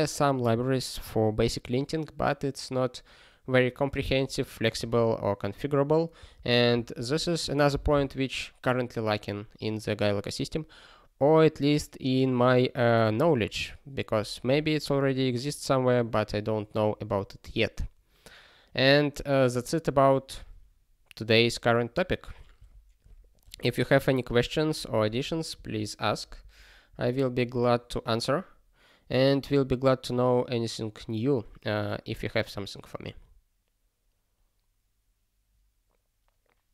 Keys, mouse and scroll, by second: 4.7 ctrl+n, 6.2 ctrl+g, 6.2 ctrl+p, 6.7 ctrl+e, 26.8 ctrl+e.